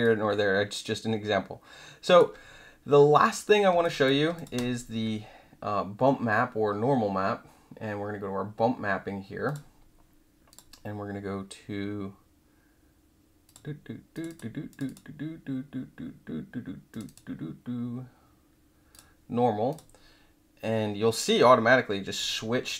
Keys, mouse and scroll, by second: 0.0-2.1 alt+drag, 3.8 alt+click, 4.3 click, 9.4 click, 10.5 click, 13.4 click, 14.1 click, 14.2 click, 14.7 click, 14.8 click, 16.9 click, 17.0 click, 18.9 click, 19.7 click, 22.3 alt+right click.